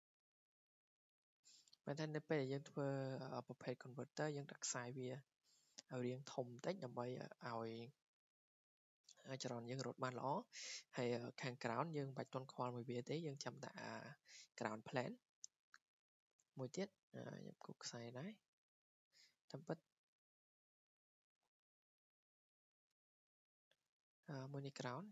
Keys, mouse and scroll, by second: 0.3 click, 1.1 click, 1.8 Escape, 1.8 click, 2.0-2.6 scroll, 3.2 scroll, 3.5-5.6 scroll down 11, 7.4 scroll, 9.2-10.5 middle drag, 17.1-23.1 drag, 23.7 Escape.